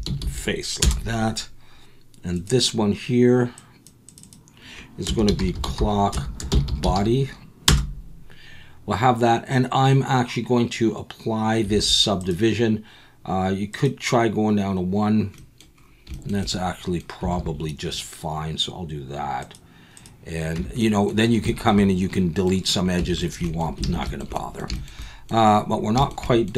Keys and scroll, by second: 11.7 alt+a, 17.3 alt+a, 20.6 Tab, 23.0 Tab, 23.8 alt+a.